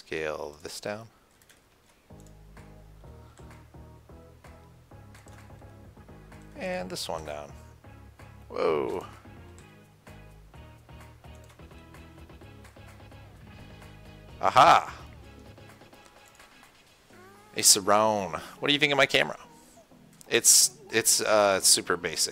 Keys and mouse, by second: 0.4 Tab, 1.7 Tab, 3.6 s, 7.0-9.1 drag, 7.4 s, 9.9 s, 16.6-19.8 drag, 19.8-21.4 middle drag.